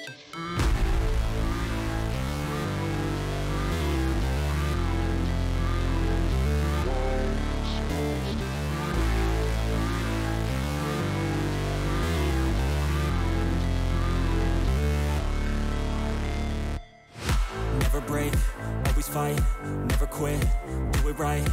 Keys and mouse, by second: 2.1 click, 4.0-5.7 drag, 9.0-10.5 drag, 13.6-15.0 drag, 16.2 click, 20.3-21.5 drag.